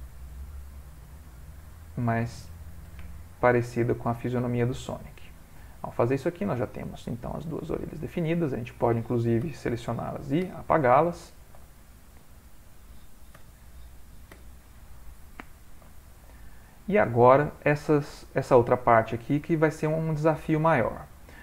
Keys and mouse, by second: 0.1 g, 1.5 click, 2.1 g, 3.5 click, 4.2 g, 5.0 middle click, 5.2 middle click, 6.4 ctrl+middle click, 6.5 ctrl+middle click, 7.5 middle click, 9.5 l, 10.5 h, 10.8 middle click, 11.3 ctrl+middle click, 12.1 shift+middle click, 12.2 middle click, 13.4 l, 14.3 h, 14.9 middle click, 15.5 ctrl+middle click, 15.9 middle click, 16.5 middle click, 16.7 ctrl+middle click, 21.0 shift+middle click.